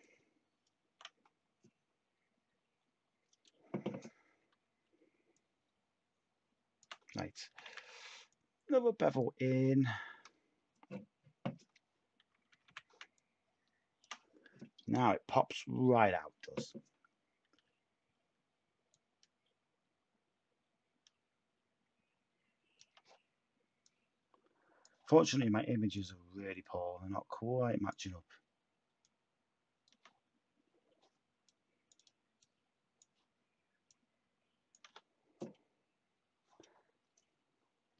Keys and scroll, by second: 7.4 typing, 12.5 typing.